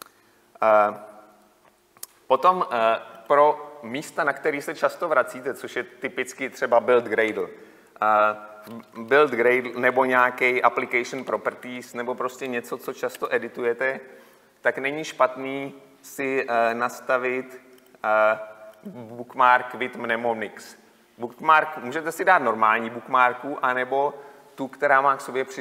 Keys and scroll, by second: 10.1 ctrl+e, 17.9 F11, 18.2 F11.